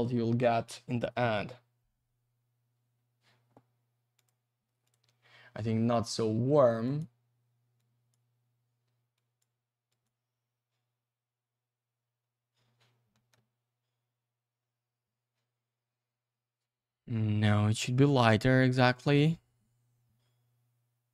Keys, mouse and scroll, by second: 2.8-4.1 scroll up 1, 4.2 click, 4.8 click, 6.8 click, 7.8 click, 9.1 click, 9.9 click, 13.1 middle click, 14.4-15.7 scroll up 1, 16.6-17.8 scroll down 1, 18.0 click.